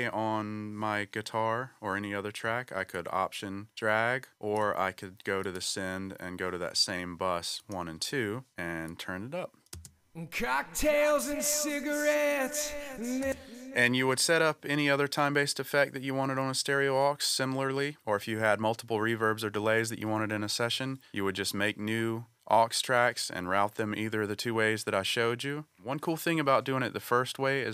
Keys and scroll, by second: 9.7 space, 13.2 space.